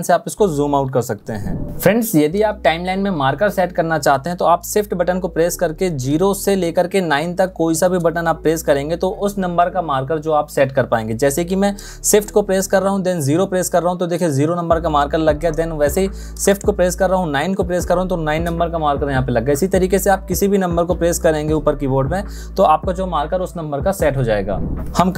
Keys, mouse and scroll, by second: 11.9 shift+0, 16.1 shift+9, 24.9 ctrl+Up.